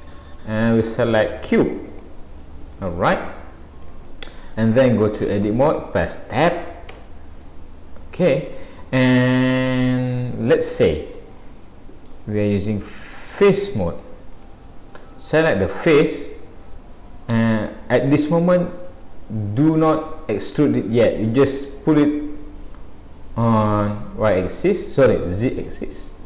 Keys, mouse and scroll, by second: 3.1 scroll up 1, 3.9 scroll up 1, 4.1 shift+middle click, 6.9 Tab, 8.3 middle click, 13.5 click, 14.4 click, 16.3-16.9 scroll down 5, 21.3 click, 24.5 shift+middle click, 25.6 middle click.